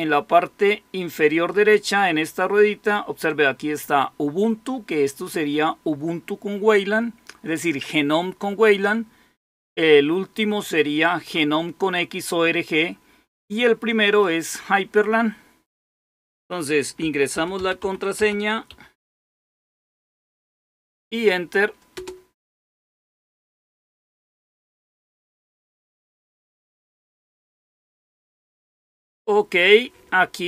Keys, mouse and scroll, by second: 1.4 click, 14.0 click, 15.7 click, 17.0-19.9 typing, 21.9 Return, 22.1 typing.